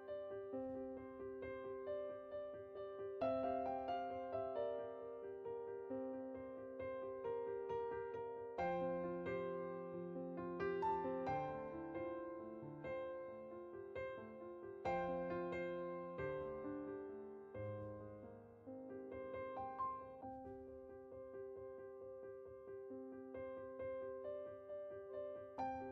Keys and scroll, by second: 4.4-4.8 typing.